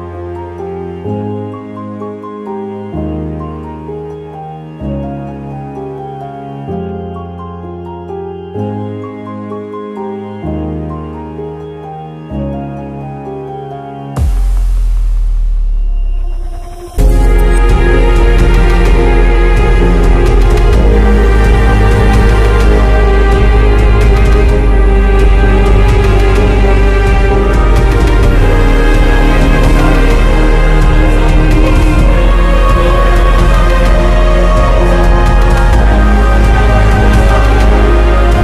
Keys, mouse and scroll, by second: 0.5-4.9 drag, 5.2 click, 9.5 click, 11.8 click, 20.5 click, 21.4 BackSpace, 25.8 click, 31.0 click, 32.3 right click, 33.2 click, 38.1 right click.